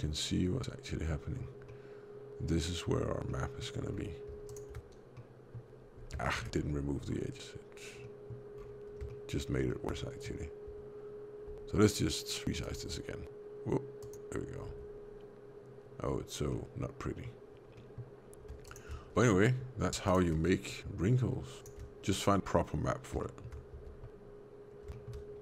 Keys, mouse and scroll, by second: 1.2 scroll down 2, 1.6 middle click, 3.2 middle click, 3.7 scroll down 3, 4.4 ctrl+shift+click, 5.0 middle click, 6.1 shift+middle click, 6.5-7.0 scroll up 5, 7.3 scroll up 2, 7.9 middle click, 8.5 scroll down 4, 9.0 shift+middle click, 9.9 middle click, 11.4 s, 12.8 g, 14.6 Tab, 16.4 middle click, 17.7 middle click, 18.6 ctrl+shift+click, 19.1 middle click, 20.0 ctrl+shift+click, 20.5 middle click, 21.5 ctrl+shift+click, 23.1 shift+middle click, 23.7 Tab, 24.5 scroll up 1, 24.8 shift+middle click.